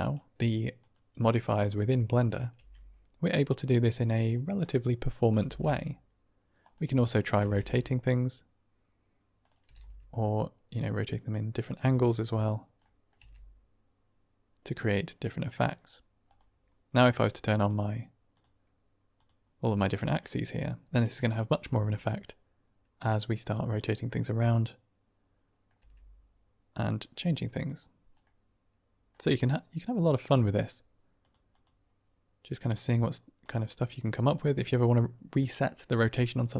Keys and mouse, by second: 1.9 middle click, 2.6 g, 3.8 typing, 4.5 click, 5.3 r, 5.6 r, 6.8 click, 7.1-7.6 typing, 9.4 click, 9.6 r, 9.8 r, 12.3 drag, 12.7-13.0 drag, 13.2 r, 17.3 click, 20.2-20.6 drag, 20.6 middle click, 20.7 click, 20.8 middle drag, 20.9 shift+click, 21.1-21.5 drag, 21.5 r, 24.5-25.6 drag, 25.6 middle click, 26.4 r, 28.5-29.1 middle drag, 33.6 click, 34.2 click, 34.5 click, 35.3 click.